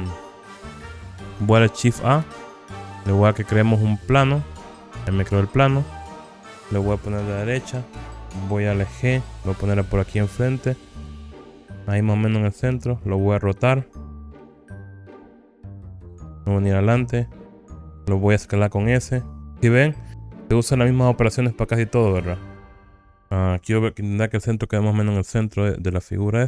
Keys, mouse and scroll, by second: 0.0-0.5 scroll down 1, 0.7 middle click, 1.5 scroll down 1, 2.4 shift+a, 7.4 KP_3, 8.8 g, 12.9 click, 13.7 r, 16.0 click, 17.2 KP_1, 18.5 s, 22.2 click, 22.7 alt+z, 22.7-23.3 scroll up 7, 24.5 g.